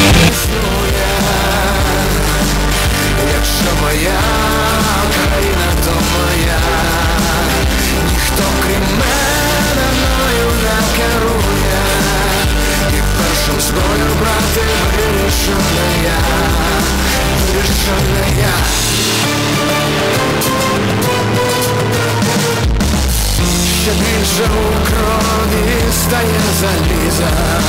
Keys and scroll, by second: 0.4 Page_Down.